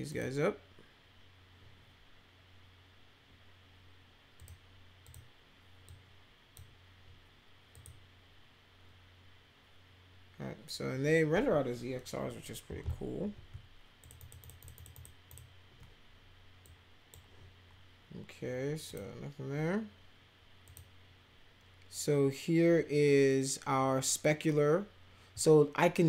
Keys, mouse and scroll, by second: 0.1 click, 4.4 click, 5.1 click, 5.8 click, 7.7 click, 12.2 ctrl+-, 14.0 ctrl+click, 14.2 ctrl+click, 14.4 ctrl+click, 14.6 ctrl+click, 14.8 ctrl+click, 14.9 ctrl+click, 15.3 ctrl+click, 16.6 click, 18.9 click, 20.7 click.